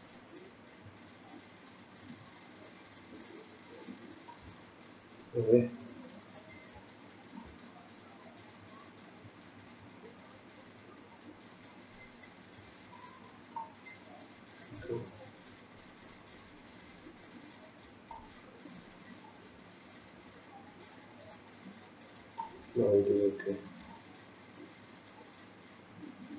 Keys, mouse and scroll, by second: 4.6-5.2 scroll down 8, 5.5-6.0 scroll down 3, 6.0-7.0 scroll up 6, 7.0 shift+middle click, 7.7-8.6 scroll up 2, 10.3-11.7 scroll down 1, 11.7 click, 11.7 scroll down 1, 15.4-16.0 scroll down 4, 16.0 scroll down 3, 16.9-18.2 scroll up 3, 18.2 shift+click, 18.2-19.2 scroll up 5, 22.6-23.5 scroll down 8, 23.4-23.9 scroll up 2, 24.1 shift+click.